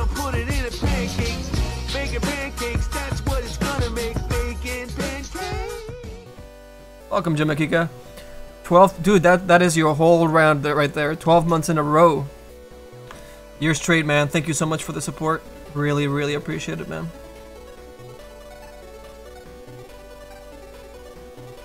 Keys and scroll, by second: 15.9 s.